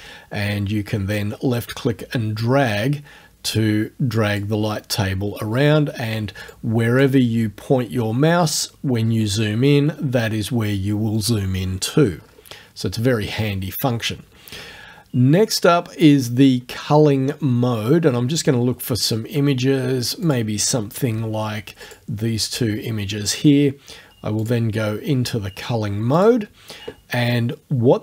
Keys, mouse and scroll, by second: 1.2-4.6 drag, 6.5-7.2 drag, 8.2-9.9 scroll up 3, 12.1-13.3 scroll down 2, 13.3-13.8 scroll down 1, 14.3-15.2 scroll down 2, 15.2-16.9 scroll down 2, 20.3 click, 21.9 shift+click, 24.4 click, 25.0 scroll down 2, 26.2 click.